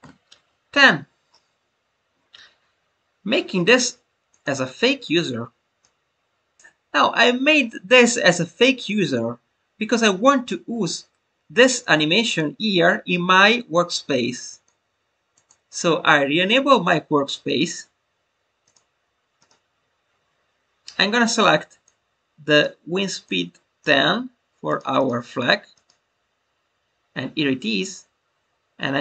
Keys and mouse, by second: 4.2 click, 5.7 click, 12.2 click, 14.4 click, 15.3 click, 17.4-18.7 drag, 19.4-21.9 drag, 22.4 click, 24.9 click.